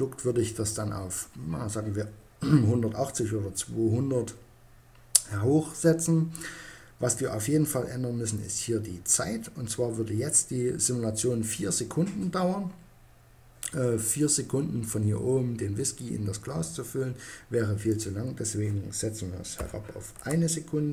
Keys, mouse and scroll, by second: 17.1-18.7 drag.